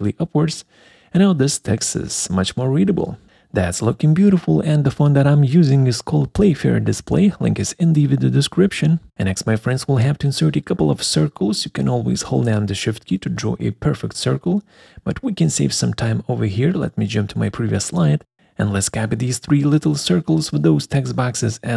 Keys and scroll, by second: 15.7 Delete, 21.4 ctrl+c.